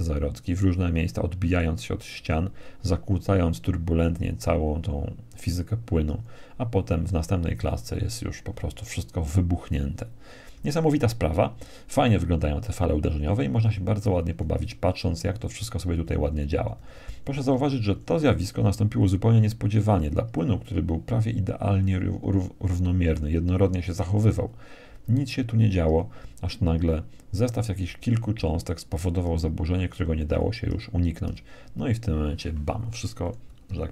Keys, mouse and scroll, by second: 5.0 Right, 9.4 Left, 11.2 Left, 11.9 Left, 12.4 Left, 12.8 Left, 13.1 Left, 13.4 Left, 13.7 Left, 14.4 Left, 14.6 Left, 14.8 Left, 15.0 Left, 15.2-15.8 Left, 16.0 Left, 16.2 Left, 16.4 Left, 16.6 Left, 16.8 Left, 16.9 Left, 17.1 Left, 17.4 Left, 18.5 Right, 18.9 Right, 19.1 Right, 20.8 Right, 21.0 Right, 21.4 Right, 21.6 Right, 22.0 Right, 22.3 Right, 22.4 Right, 22.6 Right, 23.0 Right, 23.1 Right, 24.0 Right, 24.4 Right, 24.6 Right, 25.0 Right, 25.6 Right, 26.6 Right, 27.2 Right, 28.0 Right, 29.1 Right, 29.6 Right, 30.0 Right, 32.2 Right, 32.4 Right, 33.8-33.9 middle drag.